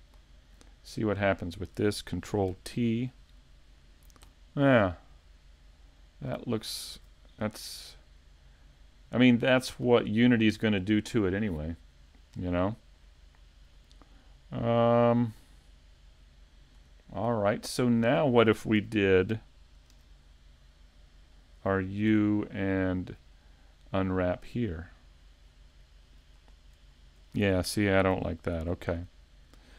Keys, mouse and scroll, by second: 2.5 ctrl+t, 5.7 scroll down 2, 7.0 scroll down 1, 7.0 a, 7.9 middle click, 13.8 scroll down 2, 15.0 shift+middle click, 15.0 scroll down 4, 16.8-17.3 scroll up 3, 17.2 middle click, 18.0 scroll down 1, 18.8 a, 19.9 KP_5, 20.3-20.8 scroll down 2, 20.7 middle click, 28.6 super+z, 28.6 shift+middle click, 28.6 scroll down 3.